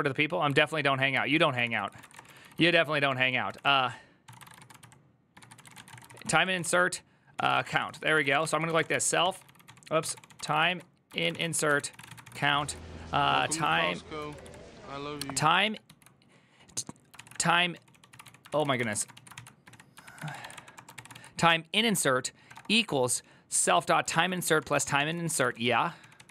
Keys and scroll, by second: 1.0 alt+{, 1.4 ctrl+c, 1.5 ctrl+c, 1.5-13.9 typing, 14.1 ctrl+n, 15.3 ctrl+n, 15.6 ctrl+y, 16.8-26.3 typing, 19.8 ctrl+c, 20.7 ctrl+c, 23.9 ctrl+c.